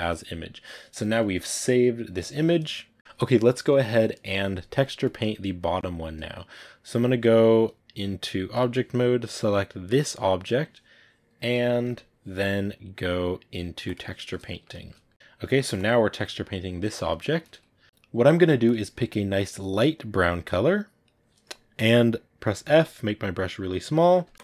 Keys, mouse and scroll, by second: 0.0-4.9 drag, 4.9-8.5 middle drag, 8.5 click, 9.2-13.8 right drag, 13.8 click, 14.3-15.6 shift+middle drag, 15.6-17.4 drag, 17.4 ctrl+z, 19.2 click, 22.4 f, 24.0 middle click, 24.3 click.